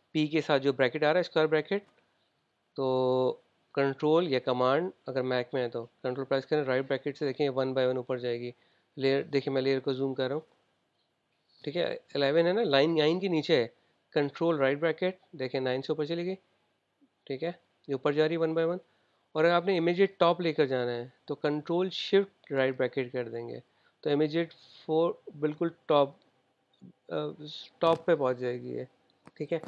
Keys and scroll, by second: 7.8 super+].